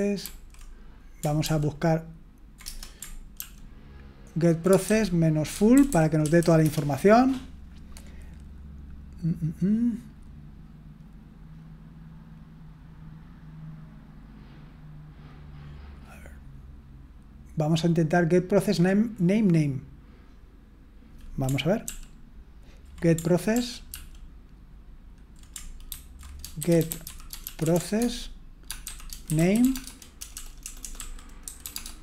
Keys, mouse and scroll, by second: 0.2 ctrl+d, 1.4 ctrl+p, 2.6 Return, 3.4 ctrl+p, 4.7-6.9 typing, 21.9 ctrl+p, 23.5 ctrl+p, 23.9 ctrl+p, 25.9 ctrl+c, 26.3-29.4 typing, 29.6 Tab, 31.7 Tab.